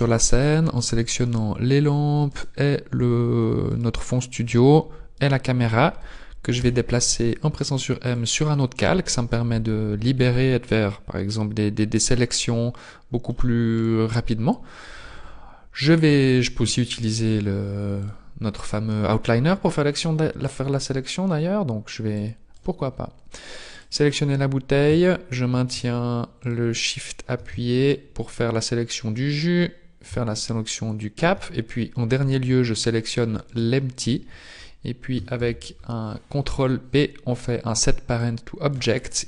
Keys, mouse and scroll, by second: 0.2 right click, 1.2 shift+right click, 2.3 right click, 3.7 shift+right click, 5.1 shift+right click, 6.6 m, 11.7-12.4 scroll up 3, 12.4 middle click, 12.4-12.7 scroll up 1, 13.9 right click, 15.3-15.6 scroll up 1, 18.1 click, 23.8 click, 26.5 shift+click, 30.5 shift+click, 33.5 shift+right click, 35.3 ctrl+p.